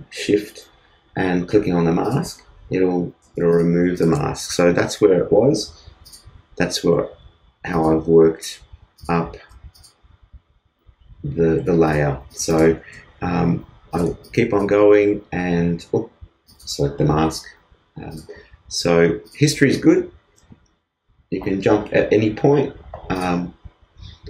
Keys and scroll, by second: 3.2 shift+space, 14.8 shift+space, 15.8 shift+super+z, 16.4 super+z.